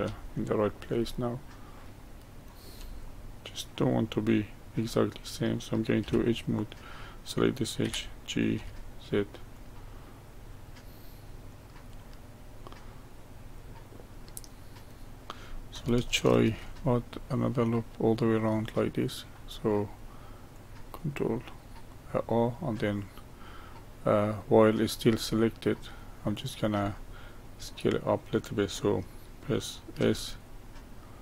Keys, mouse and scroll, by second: 0.2-3.2 shift+middle drag, 3.2 click, 6.0 2, 6.6 click, 7.8 g, 11.4 click, 12.0-15.0 middle drag, 16.4 ctrl+r, 21.9-24.9 middle drag, 25.3-28.4 middle drag, 30.0 s.